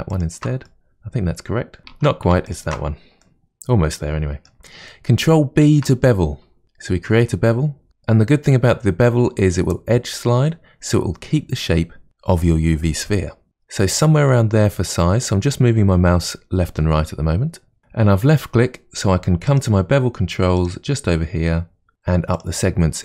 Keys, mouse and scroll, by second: 0.1 alt+shift+click, 0.6-1.8 middle drag, 1.9 ctrl+z, 2.4 alt+shift+click, 3.2-5.5 middle drag, 5.6 ctrl+b, 19.4 click, 20.6 click, 22.4 click.